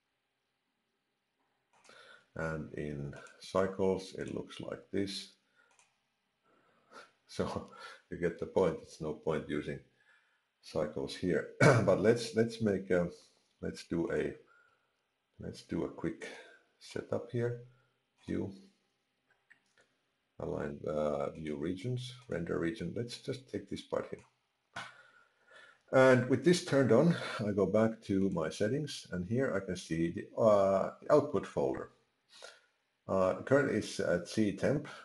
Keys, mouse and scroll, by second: 1.9 click, 3.2 click, 5.7 click, 14.0 click, 16.3 click, 18.1 click, 28.2 click.